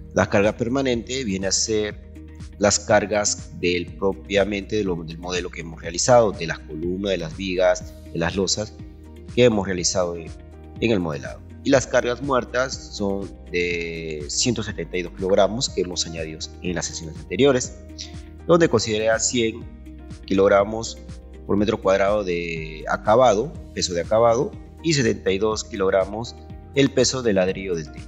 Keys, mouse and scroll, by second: 1.4 ctrl+click.